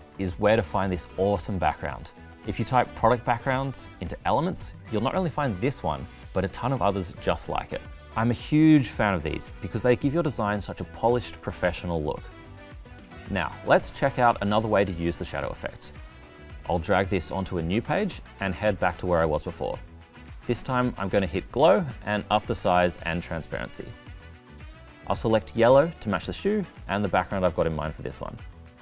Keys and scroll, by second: 15.9 super+c, 17.1 super+v.